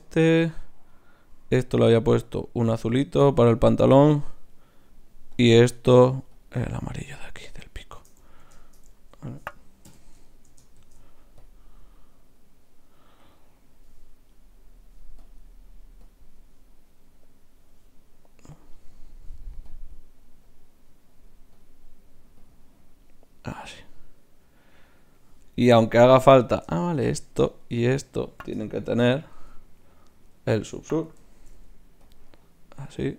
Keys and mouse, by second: 1.7-4.5 drag, 4.5-7.1 right drag, 5.3-7.1 drag, 7.6 middle click, 9.9 n, 11.0 shift+z, 11.4-13.0 drag, 11.4-13.0 right drag, 14.3-16.9 right drag, 15.2-18.8 drag, 18.8-21.4 right drag, 19.7-21.4 drag, 21.6-26.1 drag, 26.1-29.4 right drag, 29.4 z, 30.2-32.1 right drag, 31.3 ctrl+shift+c.